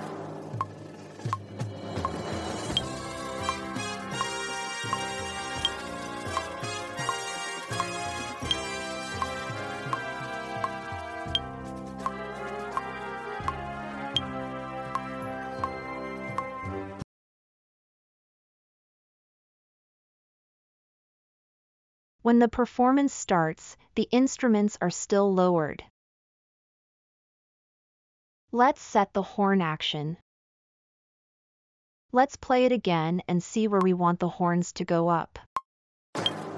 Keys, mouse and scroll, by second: 0.6-1.7 scroll, 23.7-24.8 scroll up 4.